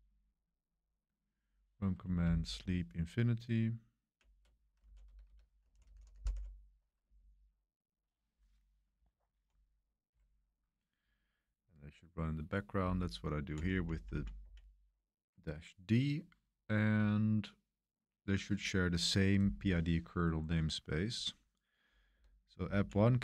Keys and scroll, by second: 2.2-3.0 Right, 3.1 Right, 3.1 Right, 3.2 Right, 3.3 Right, 3.5 Right, 3.6 Right, 3.6 Right, 3.7 Right, 3.9 Right, 4.0 Right, 4.1 Right, 4.1 Right, 4.8 Left, 5.0-6.9 typing, 7.1-7.9 Left, 7.9-8.3 Left, 8.4 Left, 8.4 Left, 8.5 Left, 9.0 Left, 12.8 Left, 13.3 Left, 13.4 Left, 13.4 Left, 13.7 Right, 13.9 Right, 14.0 Right, 14.4 Right, 22.1 BackSpace, 22.7 Right.